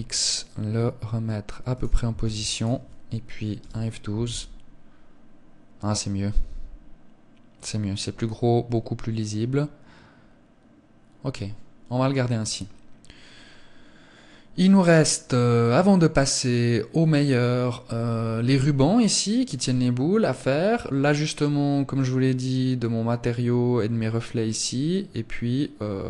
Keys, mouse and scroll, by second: 1.0 click, 1.5 ctrl+s.